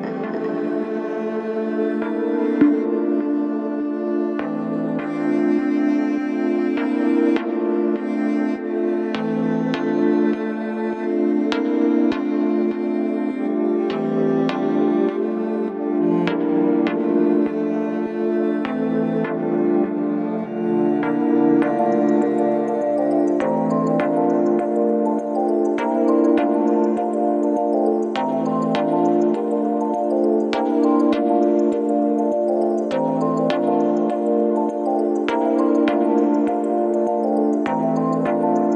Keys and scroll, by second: 2.6 ], 5.8 ], 15.4 m, 15.7 i, 16.1 Return, 21.9 ], 23.0 ], 30.6 ], 31.5 ], 33.4 ], 35.6 ctrl+d, 35.7 Escape, 36.4 Escape.